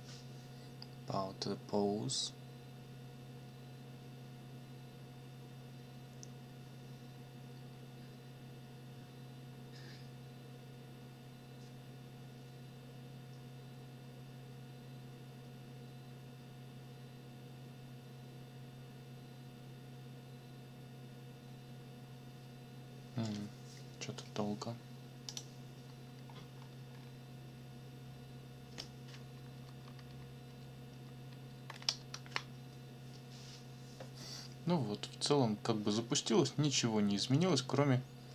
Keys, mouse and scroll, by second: 25.3 click, 26.3 scroll down 2, 26.6 scroll up 2, 26.9-27.2 scroll down 2, 29.5 Up, 30.5 Up.